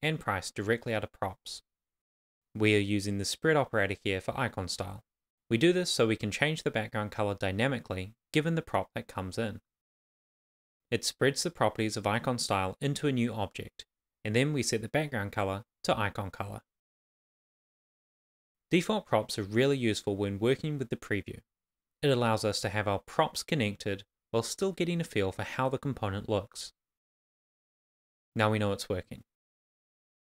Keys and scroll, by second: 0.0 shift+;, 0.1 shift+space, 0.6 shift+c, 1.6 super+s, 18.4 Return, 18.6 shift+l, 18.9 shift+i, 20.0-23.7 typing, 20.6 Return, 22.5 Return, 24.9 Right, 25.4 Return, 25.9 shift+c, 26.6 shift+;, 26.9 shift+', 28.6 super+s.